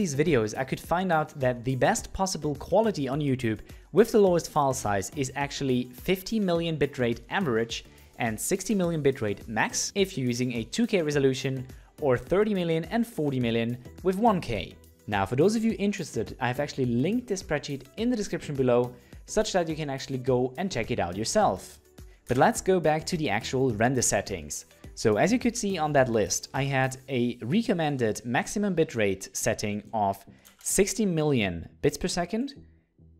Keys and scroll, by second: 22.3 alt+Tab.